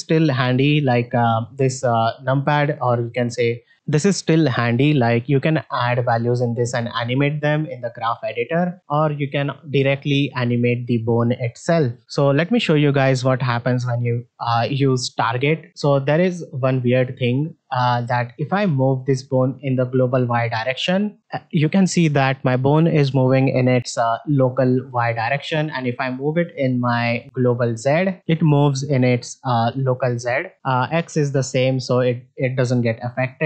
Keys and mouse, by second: 7.7-8.1 middle drag, 13.0 middle drag, 21.2-25.3 drag, 27.6-30.5 drag, 31.2-32.4 drag, 33.3 middle click.